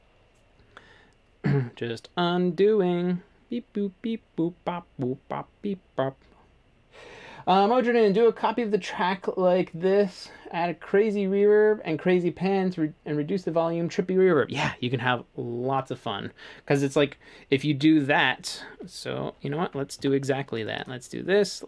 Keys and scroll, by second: 20.0 1.